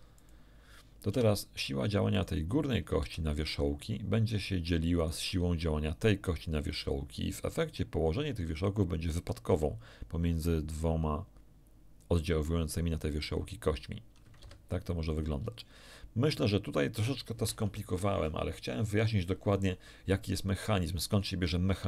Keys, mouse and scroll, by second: 0.1 click, 1.1 Tab, 2.1 right click, 2.9 z, 4.9 right click, 7.5 right click, 9.5 r, 14.3 Escape, 15.1 scroll down 1, 15.5 shift+middle click, 16.5-16.8 shift+scroll down 1, 17.0 shift+middle click.